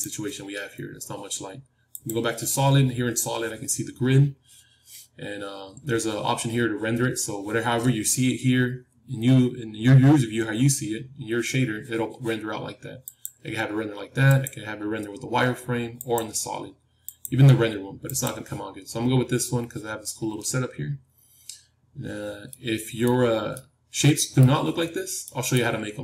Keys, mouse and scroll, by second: 1.8-4.2 drag, 13.0-20.9 drag, 18.8-21.5 middle drag, 22.4-26.0 middle drag.